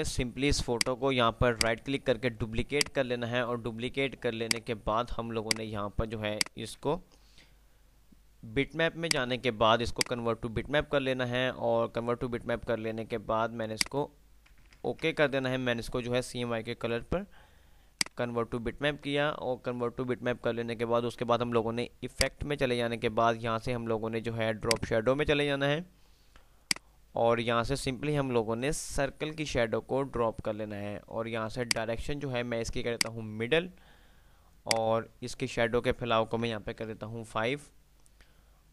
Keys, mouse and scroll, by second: 1.6 right click, 2.4 F2, 2.7-3.4 F2, 2.7 click, 4.6 click, 4.9 F3, 5.6 click, 6.1 F2, 6.1 click, 6.6-7.1 F2, 9.1 click, 13.9 click, 17.1 F3, 17.7 F2, 18.4-18.9 F2, 18.4 click, 22.2-30.1 drag.